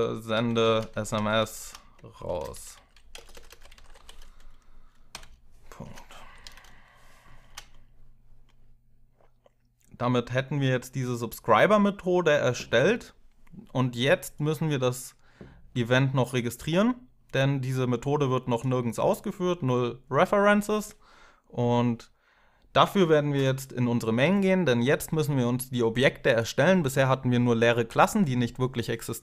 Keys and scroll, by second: 0.0-7.3 typing, 27.5 Tab.